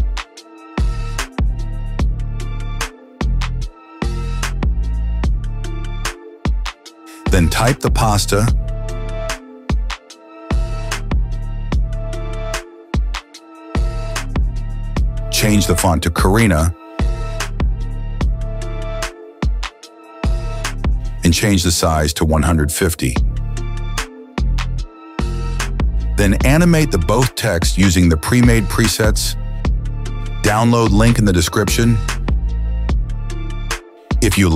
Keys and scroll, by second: 1.6 KP_0, 2.0 Return, 7.5 ctrl+d, 10.5-12.3 typing, 17.3-19.8 typing, 20.6 Return, 25.3 5, 25.5 KP_0, 25.8 Return.